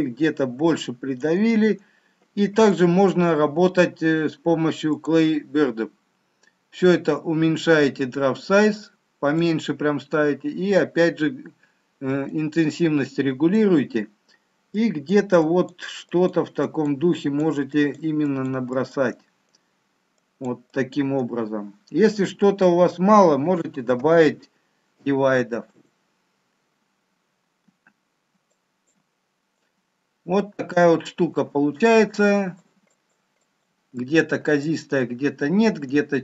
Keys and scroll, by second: 24.1 ctrl+d.